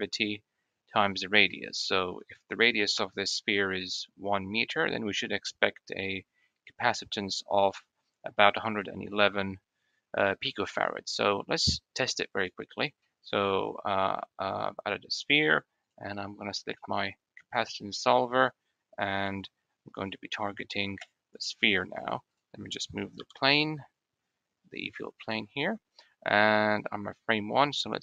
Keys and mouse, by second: 1.1 click, 2.6 n, 12.2 click, 12.6-13.3 drag, 23.0 g.